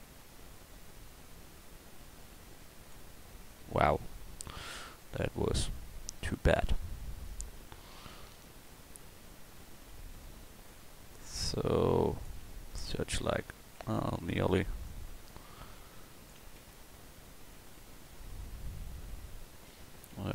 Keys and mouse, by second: 4.5 ctrl+z, 12.8 Tab, 13.8 Tab, 16.6 Tab, 19.7 Tab.